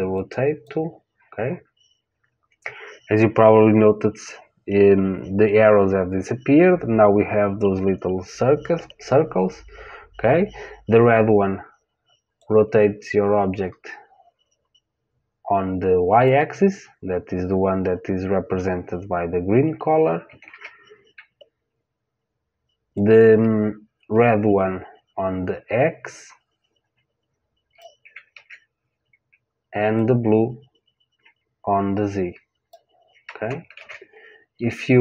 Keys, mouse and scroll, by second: 0.1 click, 12.3 click, 20.4 ctrl+z, 22.9 click, 28.3 ctrl+z, 29.9 click, 33.7 ctrl+z.